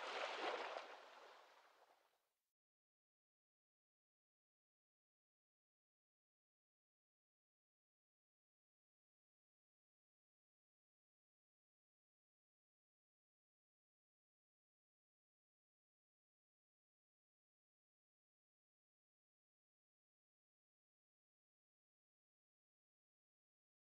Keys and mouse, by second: 1.1-4.1 middle drag, 5.6-7.6 drag, 7.6-12.0 ctrl+middle drag, 12.0-15.1 drag, 17.1-21.8 drag.